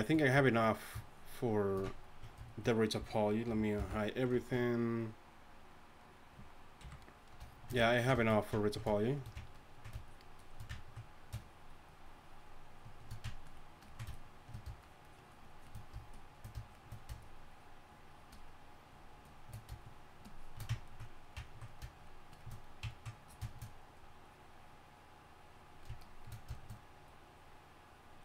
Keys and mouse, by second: 3.6 alt+h, 3.8 alt+m, 6.8 KP_1, 9.1-26.6 drag, 26.6-28.2 middle drag.